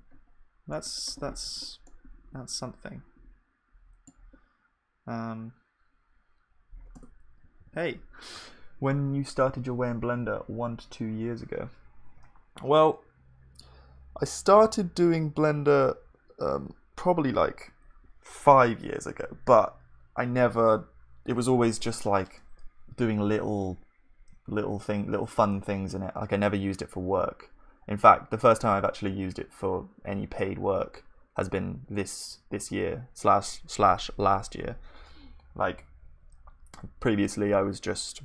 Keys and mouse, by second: 1.5 Tab, 7.0 Tab, 7.6 ctrl+s.